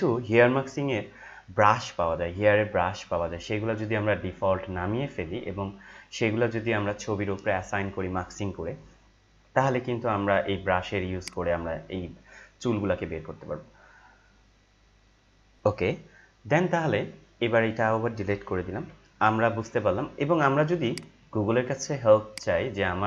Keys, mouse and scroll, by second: 1.1-1.4 scroll down 1, 4.8 scroll down 1, 11.1 click, 15.6 ctrl+m, 18.4 Delete, 20.8 click, 22.6 click.